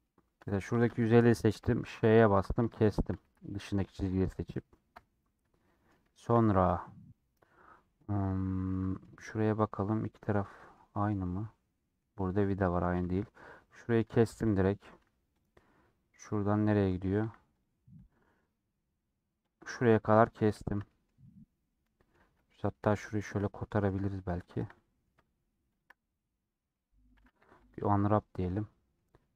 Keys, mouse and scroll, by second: 1.5 ;, 2.4 middle click, 3.2 3, 3.6-4.9 drag, 4.9 ;, 5.4-10.8 middle drag, 10.8 scroll down 2, 11.0-12.3 middle drag, 12.3 scroll down 1, 12.3 middle click, 12.9 3, 13.1 click, 13.7 middle click, 14.3 scroll up 1, 14.5 middle click, 14.9 2, 16.2 middle click, 16.3-17.3 scroll up 2, 17.4-19.5 drag, 20.0-22.1 middle drag, 22.1 2, 22.5 click, 23.4 middle click, 24.3 shift+click, 24.7 middle click, 25.6 shift+click, 26.2 middle click, 27.1 a, 28.4 u, 28.4-29.3 middle drag.